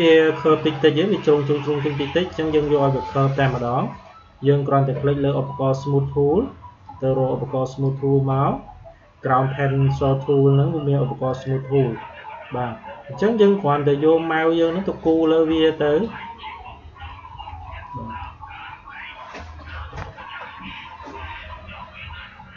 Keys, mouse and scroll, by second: 6.7-11.2 drag, 15.1-20.7 drag.